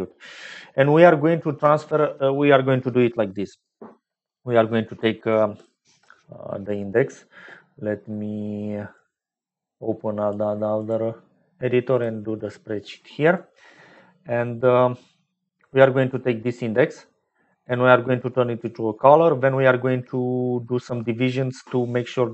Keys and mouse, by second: 8.8-10.2 drag, 10.9-12.1 drag, 14.6 click, 20.2 middle click.